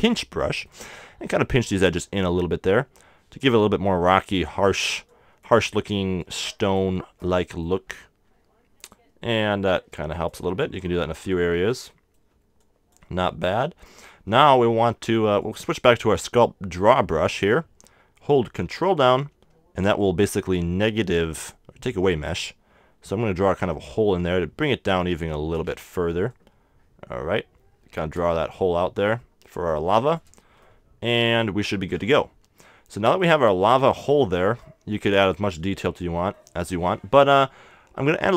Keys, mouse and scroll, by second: 0.4-3.0 middle drag, 1.4-3.6 drag, 3.6-7.5 middle drag, 4.1-7.5 drag, 9.2 click, 12.3-14.4 drag, 12.3 middle click, 13.3-17.5 middle drag, 15.4-17.5 drag, 21.5-24.2 middle drag, 22.3-24.2 drag, 25.7-28.3 middle drag, 26.3-28.3 drag, 28.4-36.3 middle drag, 29.8-31.6 drag, 36.3-38.3 middle drag.